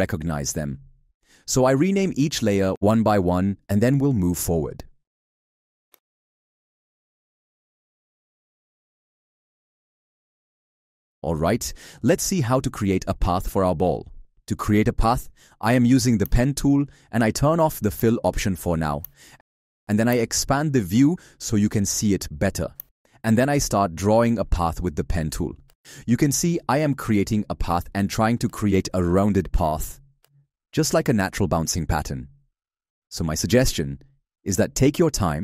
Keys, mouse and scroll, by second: 0.1 ctrl+Up, 1.8 ctrl+Up, 2.8 ctrl+Up, 3.5 ctrl+Up, 4.3 ctrl+Up.